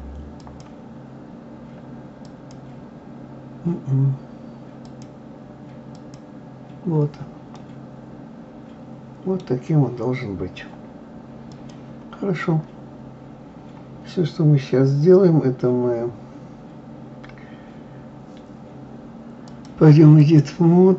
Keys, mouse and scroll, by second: 0.4-3.5 drag, 4.9-7.6 drag, 7.6-9.6 middle drag, 9.6-10.7 scroll down 2, 11.5 click, 13.2-13.5 scroll down 2, 13.6-16.1 scroll up 2, 19.5-20.9 drag.